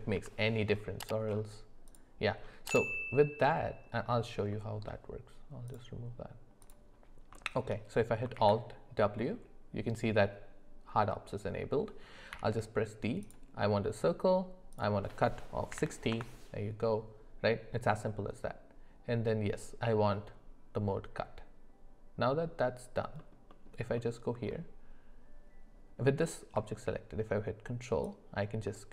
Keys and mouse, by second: 0.1 Delete, 4.5 middle click, 5.6 click, 7.3-7.6 shift+middle drag, 8.3 alt+w, 12.3 d, 23.2 alt+middle click, 23.5 alt+middle click, 24.0 alt+middle click, 28.0-28.9 ctrl+drag.